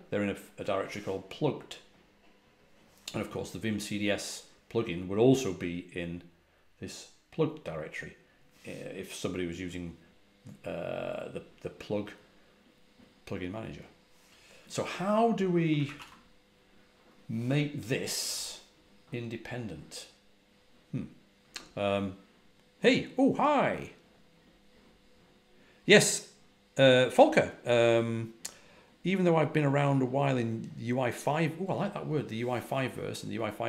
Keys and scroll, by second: 15.8 ctrl+a, 15.9 ctrl+h.